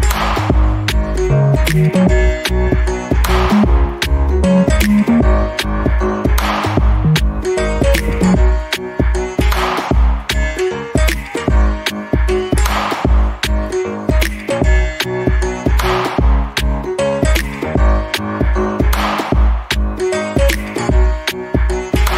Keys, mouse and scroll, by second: 4.3 double click, 4.8 ctrl+click, 9.1 double click, 9.4-9.7 scroll down 1, 10.1 alt+middle click, 10.4 alt+click, 12.4-12.8 scroll down 2, 12.8 alt+middle click, 13.2 alt+click, 17.1 alt+middle click, 17.8 click, 18.2 scroll down 1, 18.4 alt+click, 19.3 alt+middle click, 19.7 alt+click, 21.9 alt+middle click.